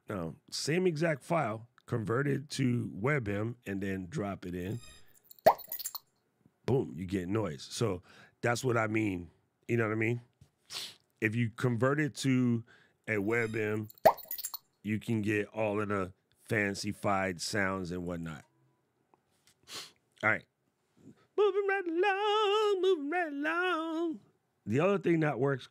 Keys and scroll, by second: 17.9 super+z.